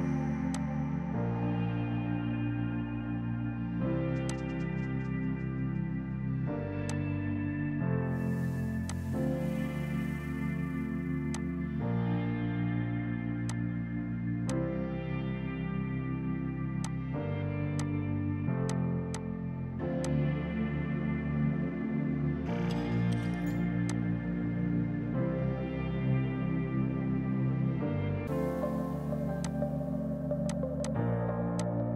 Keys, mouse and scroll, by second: 2.0 ctrl+z, 4.3 click, 6.2 right click, 6.9 click, 8.9 click, 11.4 click, 12.7 right click, 13.5 shift+click, 14.5 click, 16.9 alt+click, 17.8 shift+click, 18.7 shift+click, 19.2 shift+click, 20.1 shift+click, 21.6 Delete, 23.9 click, 29.5 click, 30.5 click, 30.9 click, 31.6 click.